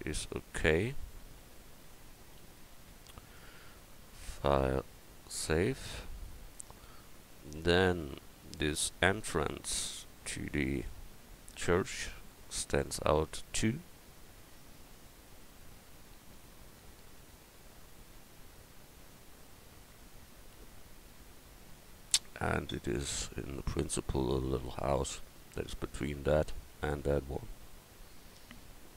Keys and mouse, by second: 1.4 Tab, 1.9 Tab, 2.4 a, 3.3-6.4 drag, 10.9 KP_1.